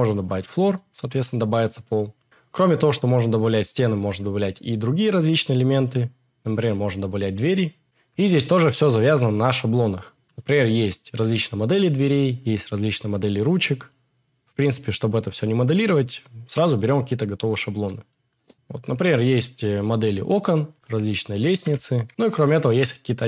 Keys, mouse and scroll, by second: 2.8 click, 3.7-5.4 drag, 10.3 click, 11.9-12.8 drag, 13.8 middle drag, 18.5 x, 19.8 click, 21.5 g, 21.7 y, 22.0 x.